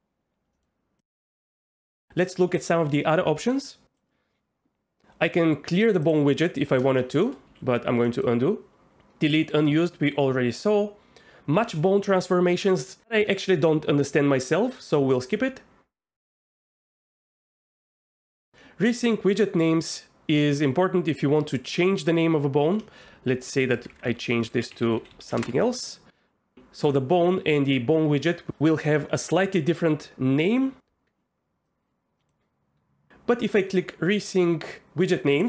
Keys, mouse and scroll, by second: 0.5 middle click, 6.1 click, 7.0 shift+drag, 7.2 shift+middle click, 7.4 ctrl+z, 8.0 middle click, 20.6 click, 22.7 F2, 23.9 Left, 24.8 shift+x, 25.0 shift+x, 31.7 click.